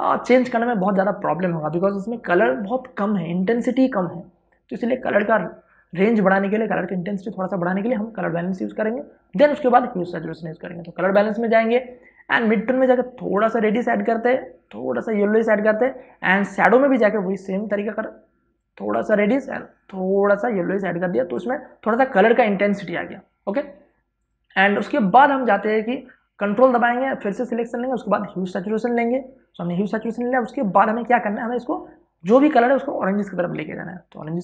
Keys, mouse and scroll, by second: 13.7-26.3 drag, 31.2 space, 31.5 ctrl+click, 32.0-34.4 drag.